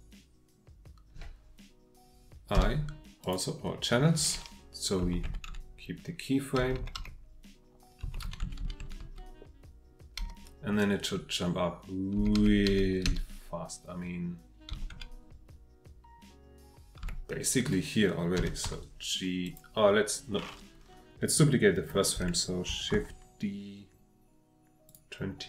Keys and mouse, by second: 2.5 i, 5.0 Right, 5.2 Right, 5.5 Right, 6.6 Left, 6.8 Left, 8.0 Right, 8.2 Right, 8.4 Right, 8.6 Right, 8.8 Right, 9.0 Right, 10.2 Left, 12.2 Left, 14.7 Right, 14.9 Right, 17.0 Right, 18.4 g, 18.6 z, 19.4 click, 21.3-22.0 drag, 22.9 shift+d, 24.9 click.